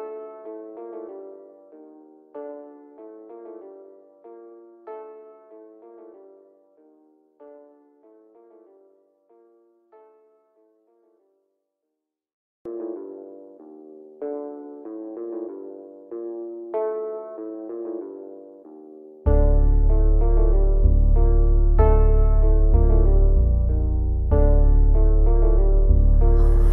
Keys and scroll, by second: 3.4 c, 7.5 c, 8.5 ctrl+z, 10.0 c, 11.2 F3, 11.8 Escape, 12.4 shift+F2, 12.8 Escape, 13.3 F3, 13.8 Escape, 14.5 shift+F2, 14.9 Escape.